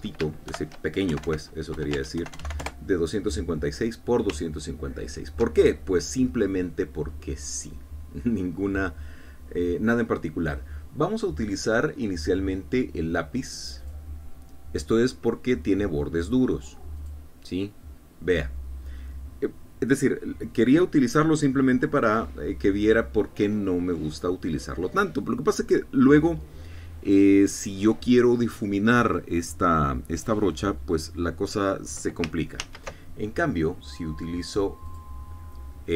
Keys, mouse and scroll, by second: 1.4 shift+End, 2.0-3.3 typing, 2.9 shift+Tab, 3.5 shift+KP_Enter, 6.0 ctrl+scroll up 2, 6.5 ctrl+click, 7.6 click, 14.8 click, 17.9 click, 33.6 ctrl+z, 35.8 click.